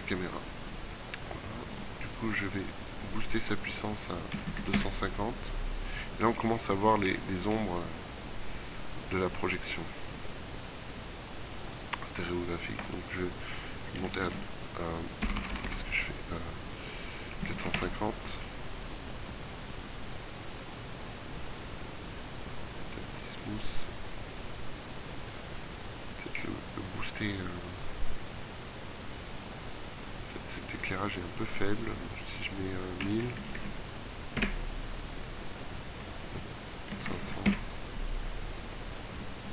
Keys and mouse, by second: 6.1 click, 15.1 BackSpace, 15.6 BackSpace, 19.9-23.3 middle drag, 23.3-24.9 drag, 29.6-30.7 middle drag, 30.7-31.9 right drag, 32.9 KP_0, 33.7 KP_0, 37.3 KP_0.